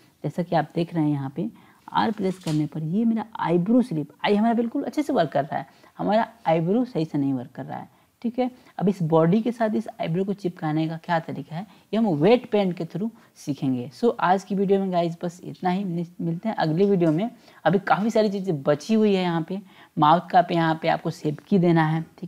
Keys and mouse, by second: 0.2 click, 1.8 r, 15.3-16.8 drag.